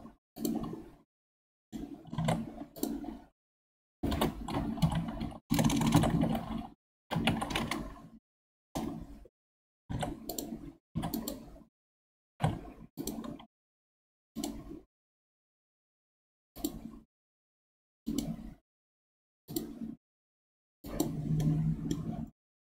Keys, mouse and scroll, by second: 1.5 middle click, 2.2 ctrl+Tab, 4.2 F3, 5.6 BackSpace, 9.9 ctrl+Tab, 10.9 1, 11.1 click, 12.3 g, 14.0 a, 14.3 right click, 18.1 right click, 20.3-20.8 scroll up 4, 20.8 click, 21.4-22.6 middle drag.